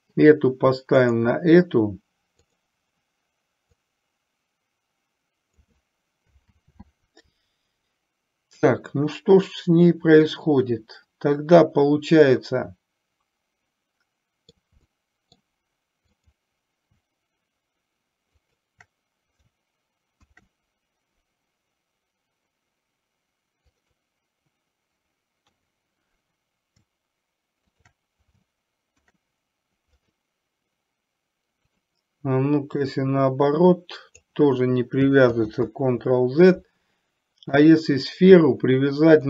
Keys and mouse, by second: 4.0-5.7 drag, 6.6 ctrl+z, 12.4-14.6 middle drag, 14.9-15.5 middle drag, 16.2 click, 18.6 shift+click, 20.2 ctrl+p, 25.6 KP_3, 29.0 ctrl+p, 31.9 click, 32.9-34.4 drag, 37.7 click.